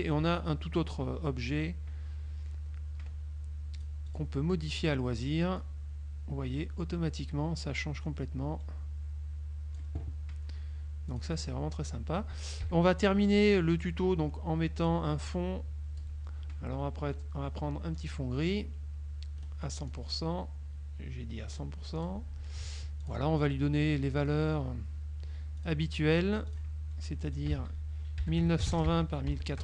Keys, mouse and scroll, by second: 3.9 click, 5.7 click, 11.2 click, 12.8 KP_Subtract, 13.6 click, 14.9 click, 15.3 click, 18.1 click, 19.5 click, 20.0 click, 21.6 right click, 22.0 click, 23.1 click, 24.3 click, 25.7 click, 26.6 click, 27.4 ctrl+click, 27.6 ctrl+a, 28.5-29.6 typing, 29.0 Tab.